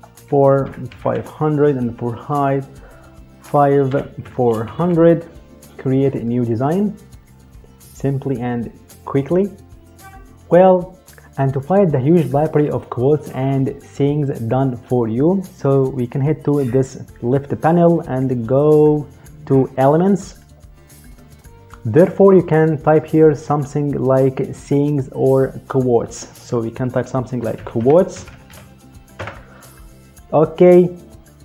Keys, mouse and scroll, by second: 0.4-0.8 typing, 2.1 click, 3.6-4.5 typing, 5.9 click, 20.0 click, 23.2 click, 27.1-28.2 typing, 28.9 Return.